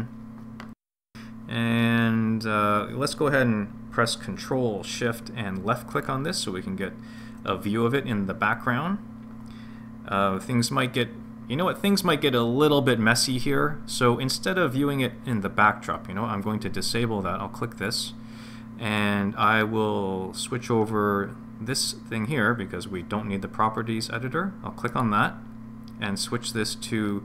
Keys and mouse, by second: 5.9 ctrl+shift+click, 17.9 click, 25.1-27.2 drag.